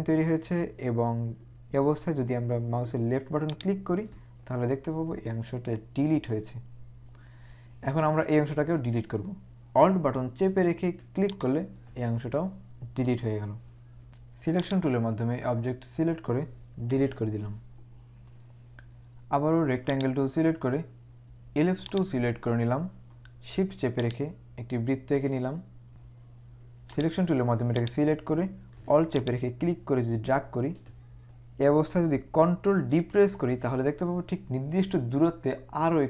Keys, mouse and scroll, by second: 14.8 click, 17.0 Delete, 20.1 right click, 22.0 click, 24.0 click, 25.9 z, 27.1 click, 29.2 click, 32.9 ctrl+d.